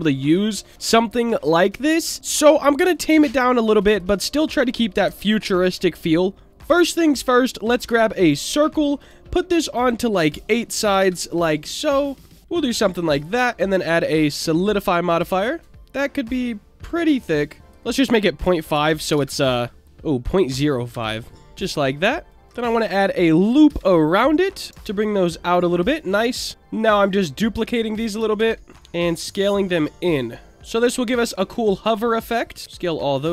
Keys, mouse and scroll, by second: 3.5-4.0 drag, 5.1 Delete, 6.5 shift+a, 9.6-11.4 drag, 12.3 middle click, 12.4 Tab, 13.1-17.1 drag, 17.6-21.4 drag, 22.3 click, 22.4 Tab, 22.4 ctrl+r, 22.9 click, 23.6 d, 24.7 s, 26.2 right click, 27.2 click, 28.3 shift+d, 28.7 click, 28.7 s, 28.7 shift+z, 29.6 click, 30.5-31.0 middle drag, 31.8 click, 32.6 s, 32.6 click.